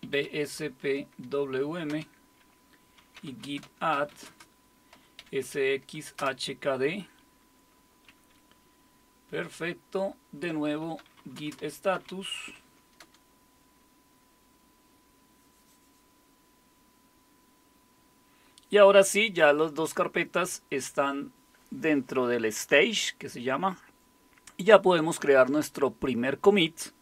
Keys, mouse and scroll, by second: 0.0-6.2 typing, 10.6-12.8 typing, 13.0 Return.